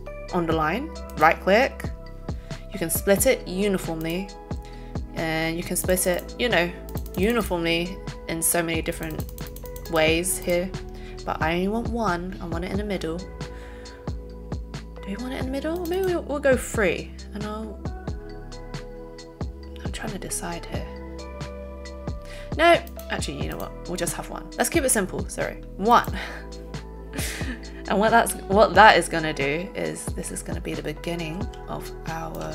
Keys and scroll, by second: 31.4 z.